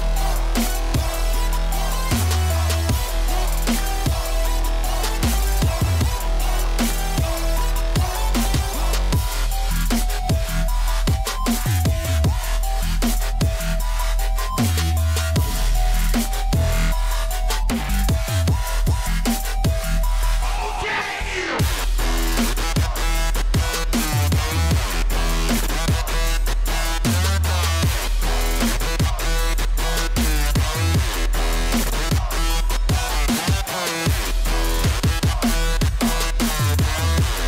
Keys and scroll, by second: 5.0 j, 11.5-12.4 typing, 17.6-19.6 typing, 22.7-23.7 typing, 26.8 z, 28.0 p, 29.1 l, 31.5 Escape, 32.8-33.4 typing, 33.4 Return, 33.8 Escape.